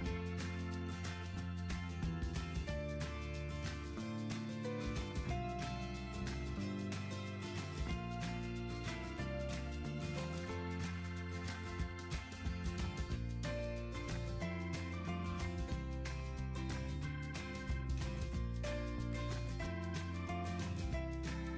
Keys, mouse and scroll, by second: 20.4-21.0 typing, 21.3 Return.